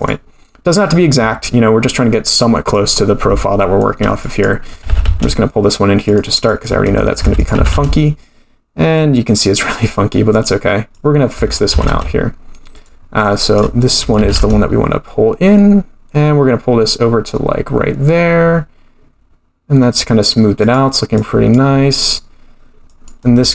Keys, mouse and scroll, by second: 2.7 click, 3.4 shift+middle click, 4.2 click, 4.9 g, 6.5 click, 7.2 e, 7.6 g, 10.3 g, 10.9 click, 11.7 g, 13.4 click, 14.2 g, 21.1 click, 22.0 click, 22.8 click.